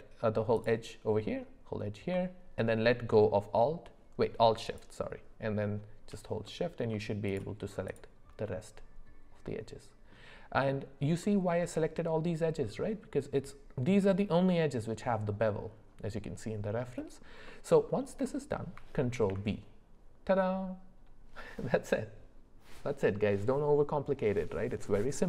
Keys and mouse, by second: 6.5 middle click, 7.3 shift+click, 7.9 shift+click, 8.5-10.1 middle drag, 11.2 middle click, 17.5 middle click, 19.1 ctrl+b.